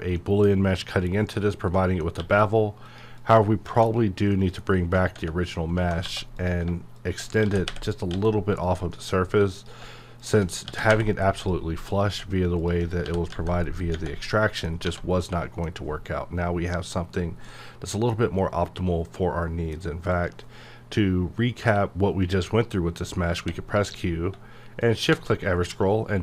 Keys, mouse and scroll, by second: 1.2-1.8 scroll down 1, 1.8 middle click, 2.2 q, 2.9 click, 3.2 click, 3.7 Tab, 4.3 middle click, 4.8 Tab, 6.4 click, 7.4 g, 8.5 click, 8.9 middle click, 9.6 click, 10.7 g, 11.4 click, 13.0 g, 13.8 click, 14.2 middle click, 14.8 1, 15.2 middle click, 15.7-16.6 scroll up 1, 17.5 middle click, 18.1 scroll down 1, 18.4-20.1 middle drag, 20.1 click, 23.3 q, 24.8 shift+click, 25.5 scroll up 1.